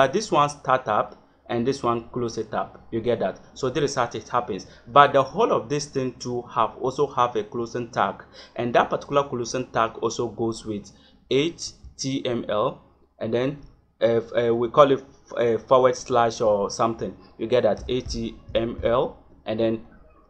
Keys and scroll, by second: 9.8 Return, 10.4 Return, 11.6 shift+,, 14.4 BackSpace, 15.0 ., 15.9 BackSpace, 16.4 /, 17.7 h, 18.0 t, 18.5 m, 18.7 l.